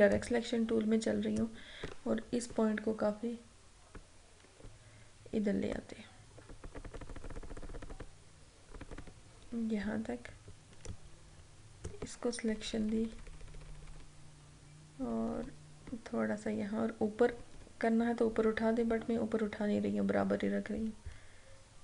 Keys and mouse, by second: 0.2-2.6 drag, 2.6 Right, 11.0-12.6 drag, 12.6 Left.